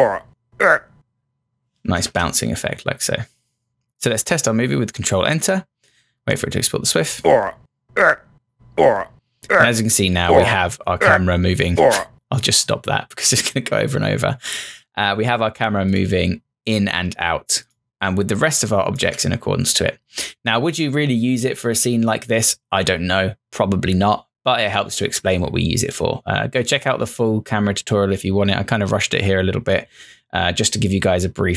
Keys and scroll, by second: 2.0 ctrl+Return, 19.0 Return.